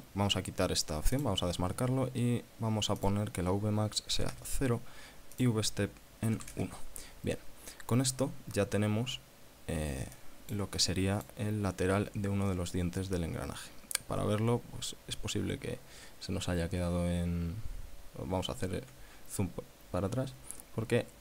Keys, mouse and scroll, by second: 1.4 click, 3.2 click, 4.4 KP_0, 4.6 KP_Enter, 5.6 click, 6.6 KP_1, 6.8 KP_Enter, 10.4 click, 17.2 scroll down 2, 18.0-18.7 scroll down 4.